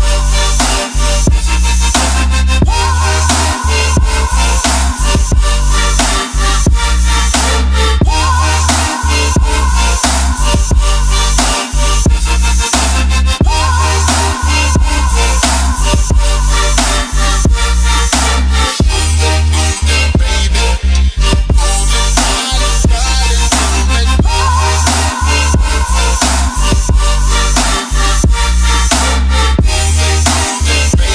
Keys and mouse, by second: 12.5 KP_1, 12.8 Tab, 14.0 ctrl+r, 16.1 click, 19.0 click, 21.7 click, 27.2 ctrl+z, 27.7 ctrl+r, 29.2 click, 29.7 ctrl+z, 29.9 middle click, 30.9 ctrl+r.